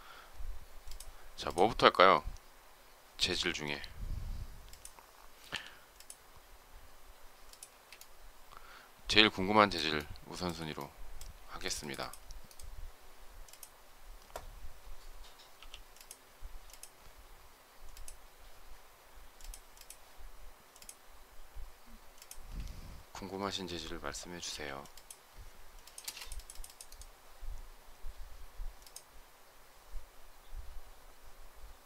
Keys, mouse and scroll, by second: 7.5 space, 9.8 shift+middle click, 11.2 space, 15.4 m, 25.8 space.